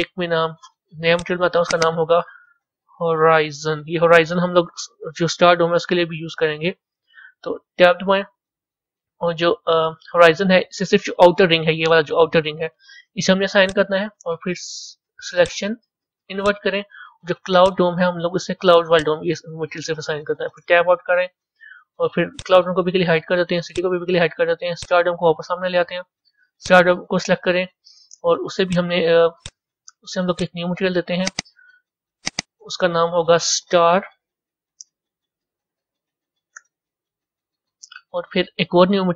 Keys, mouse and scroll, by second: 1.0 click, 1.7-4.7 drag, 7.8 b, 11.6-13.5 middle drag, 13.5 click, 15.3 click, 17.5 click, 18.8 click, 20.6 Tab, 22.2 click, 23.6 click, 24.6 click, 25.4-26.5 scroll down 8, 26.5 click, 28.6 click, 30.2 click, 31.2 click, 31.5 click, 32.1 click, 32.3-34.9 drag, 34.9 BackSpace.